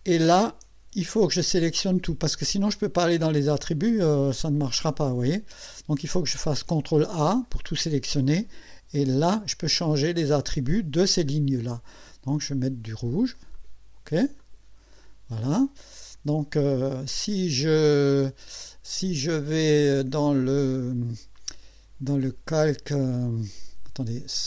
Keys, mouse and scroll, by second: 4.5 click, 6.4 ctrl+a, 9.0 click, 12.4 click, 13.5 click, 14.4 click.